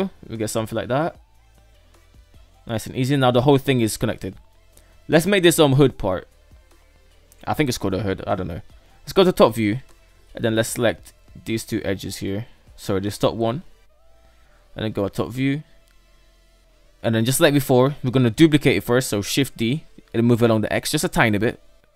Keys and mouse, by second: 0.2-1.6 middle drag, 2.0 KP_3, 2.4-3.3 shift+middle drag, 5.1 shift+middle drag, 7.4 KP_7, 8.5 Tab, 9.9 right drag, 10.9 shift+right click, 11.3-11.7 middle drag, 12.2 right click, 13.1 shift+right click, 13.8 Tab, 14.1 KP_7, 15.3 shift+middle click, 15.7 Tab, 16.7 shift+middle drag, 18.9 shift+d.